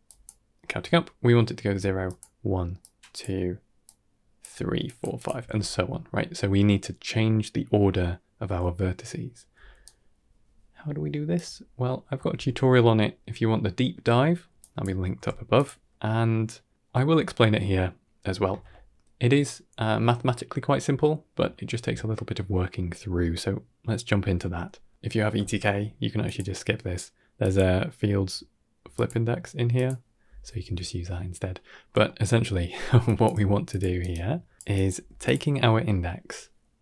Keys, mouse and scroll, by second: 0.0-5.2 typing, 1.9 click, 2.7 click, 3.7 click, 4.7 click, 5.0 click, 9.4 d, 9.7 right click, 11.2 d, 11.3 d, 11.7 middle click, 12.2 ctrl+space, 13.0-13.4 scroll down 3, 13.4 middle click, 14.0 middle click, 14.5-14.8 drag, 15.0 g, 15.8 middle click, 16.6-17.1 middle drag, 24.0-24.5 middle drag, 25.3 shift+a, 30.5 typing, 31.6 scroll up 2, 31.9 middle click, 32.6 middle click, 32.9 drag, 33.3 g, 33.9 shift+right drag, 34.2 middle click, 34.4 g, 34.6 drag, 35.4-35.9 middle drag.